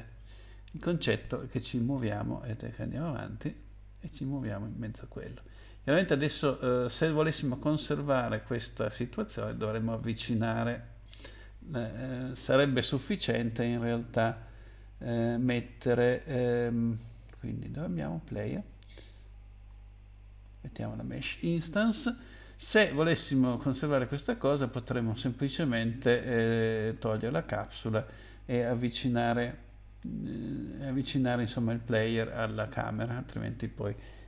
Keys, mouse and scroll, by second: 2.1 Up, 2.5 Up, 2.7 Up, 2.9 Up, 3.1 Up, 3.2 Up, 3.5 Up, 3.7 Up, 4.5 Down, 4.9 Down, 5.1 Down, 5.3 Down, 5.5 Down, 5.7 Down, 5.8 Down, 6.8 Up, 7.0 Up, 7.1 Up, 7.3 Up, 8.1 Down, 8.3 Down, 8.4 Down, 8.9 Down, 9.2 Down, 9.5 Up, 10.3 Up, 10.5 Up, 10.8 Up, 11.0 Up, 12.9 click, 19.0 click, 20.9 click.